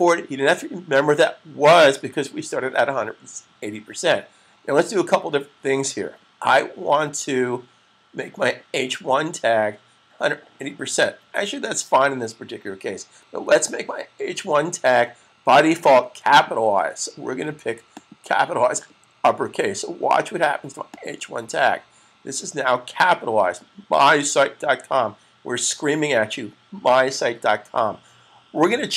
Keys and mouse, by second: 16.3 click, 20.4 click.